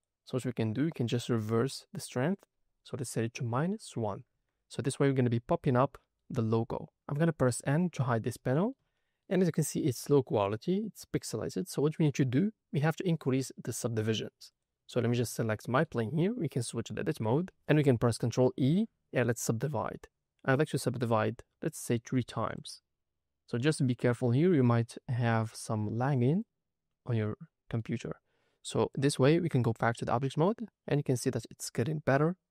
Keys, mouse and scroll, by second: 2.2-4.2 drag, 5.6 middle click, 6.3-6.7 scroll up 1, 6.7 middle click, 7.6 n, 8.3 middle click, 8.9 shift+middle click, 9.4 middle click, 10.3-10.6 scroll up 3, 10.9-11.7 scroll down 4, 11.7 middle click, 12.3-14.0 scroll up 1, 14.4 click, 15.4-16.6 middle drag, 16.6 Tab, 18.4 ctrl+e, 21.0 click, 22.5 click, 26.3 click, 27.2 middle click, 28.9-29.7 drag, 30.3 middle click, 31.4-31.8 scroll up 2, 31.8 middle click, 32.4-32.5 scroll down 2.